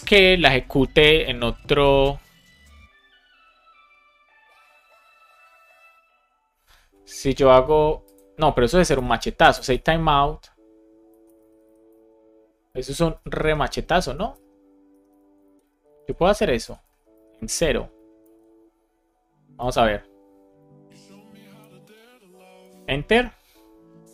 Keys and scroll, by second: 9.5 shift+t, 11.9-15.6 typing, 15.9 super+Right, 16.8 space, 17.5 shift+o, 18.2 super+s, 21.5 Return, 22.5 Return.